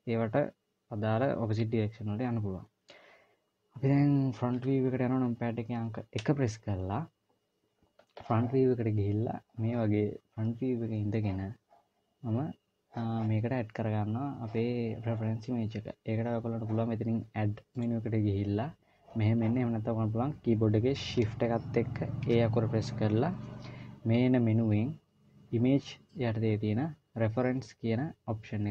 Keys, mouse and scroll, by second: 5.0 KP_1, 6.5 KP_1, 18.2 click, 22.6 shift+a.